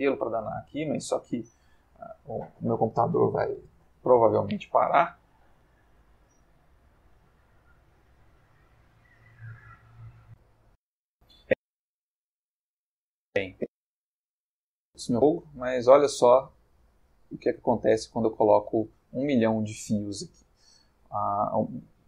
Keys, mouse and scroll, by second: 10.2 click, 15.8-19.8 middle drag.